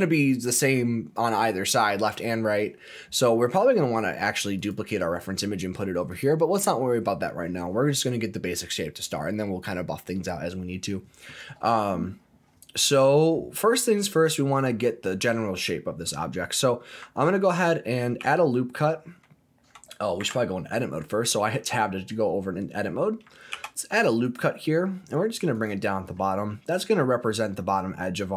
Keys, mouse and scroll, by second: 4.6 click, 6.1 click, 10.4-13.0 scroll up 3, 15.0-15.3 scroll down 1, 15.3-15.7 scroll up 1, 15.7-16.7 scroll down 2, 16.7 scroll up 1, 18.2 ctrl+r, 20.2 Tab, 23.5 ctrl+r, 25.5 click.